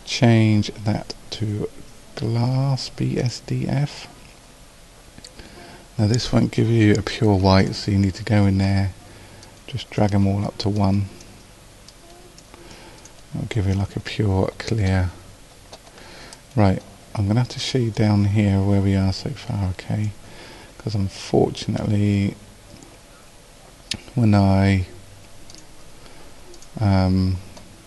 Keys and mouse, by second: 25.5-27.8 drag.